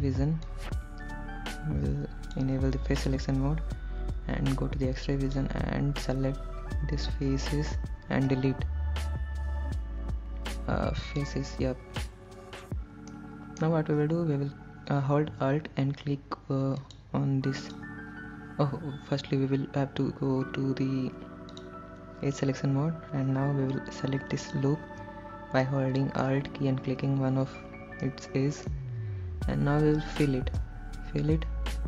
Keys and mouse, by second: 0.0 click, 0.8-2.6 drag, 3.2-5.7 drag, 8.5 x, 13.3 middle click, 17.0 alt+click, 17.9 alt+click, 21.8 click, 24.7 alt+click, 25.9 middle click, 28.4 middle click, 30.8 f.